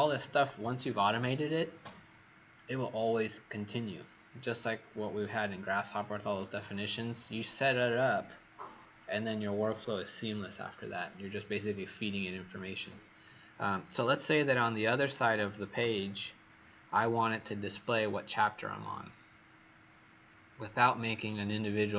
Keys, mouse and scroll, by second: 13.8 click, 14.4 click.